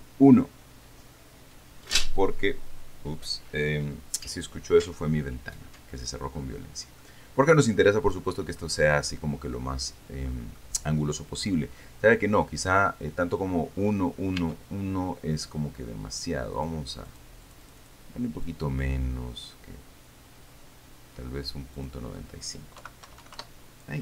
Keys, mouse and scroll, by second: 6.2-6.6 scroll down 2, 6.6-7.0 scroll up 2, 7.0 scroll down 2, 7.3-8.4 middle drag, 8.0-8.9 scroll up 2, 8.9 middle click, 9.0-11.0 drag, 13.8-14.1 scroll down 2, 14.1-14.8 scroll up 2, 14.7 Tab, 16.8 click, 17.4-18.6 drag, 18.7-22.0 drag, 22.1 click, 23.1 KP_Decimal, 23.3 KP_9, 23.5 KP_5, 23.8 KP_Enter.